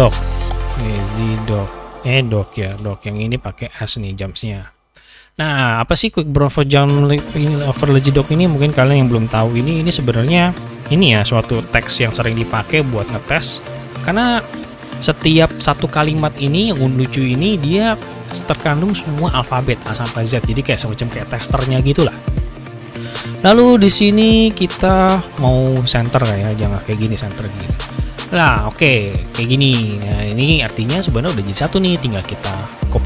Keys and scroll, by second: 0.0-3.3 typing, 9.4 ctrl+c, 11.5 ctrl+v, 12.3 ctrl+v, 13.1 ctrl+v.